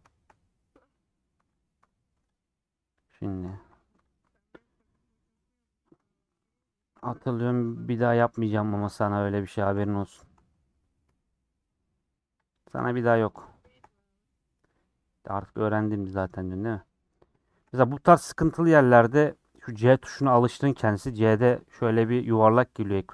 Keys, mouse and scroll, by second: 0.1 shift+middle click, 0.5 scroll up 1, 1.5 alt+click, 2.3 alt+click, 4.5 middle click, 5.2 KP_Decimal, 5.4-6.8 middle drag, 6.8 alt+shift+click, 7.0 scroll down 3, 7.5 shift+middle click, 8.2 scroll down 3, 8.5 middle click, 9.0 scroll up 2, 9.6 alt+shift+click, 9.8 middle click, 10.6 scroll up 4, 11.0-12.4 middle drag, 12.4 alt+shift+click, 12.8 scroll up 2, 13.7 shift+click, 13.9 middle click, 14.4-15.0 scroll down 5, 15.1-19.2 middle drag, 19.4 scroll down 2, 19.6-23.1 middle drag.